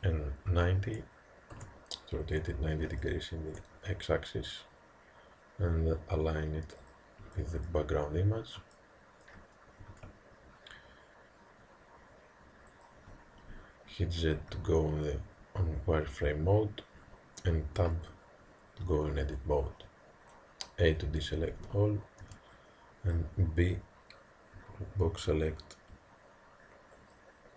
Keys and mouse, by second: 3.0-6.8 middle drag, 3.7 g, 7.4-10.4 middle drag, 9.9 g, 14.4 z, 17.9 Tab, 19.7 a, 22.3 b, 24.7 g.